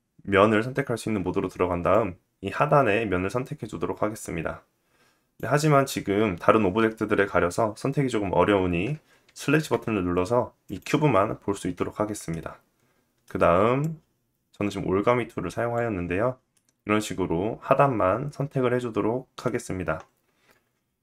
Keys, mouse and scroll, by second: 1.5-10.3 drag, 9.2 /, 10.3-13.3 middle drag, 13.3-21.0 drag, 16.1 middle click.